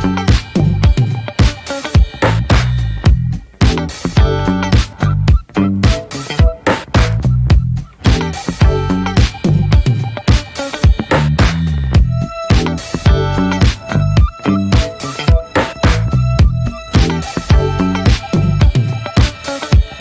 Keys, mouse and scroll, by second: 3.1 click, 3.4 f, 5.5 click, 5.9 scroll down 1, 6.1 middle click, 7.2-7.8 scroll up 3, 7.8-10.4 shift+middle drag, 10.4 click, 10.8 middle click, 11.1 scroll down 2, 11.3 middle click, 11.9 ctrl+z, 12.6 alt+scroll up 1, 12.7 alt+middle click, 13.4 shift+middle click, 13.6-14.6 shift+scroll up 3, 13.9 shift+middle click, 14.6 click, 14.9 scroll up 1, 15.4 shift+middle click, 16.2-19.3 drag, 19.3 scroll up 1, 19.6 scroll down 1, 19.8-20.0 shift+middle drag.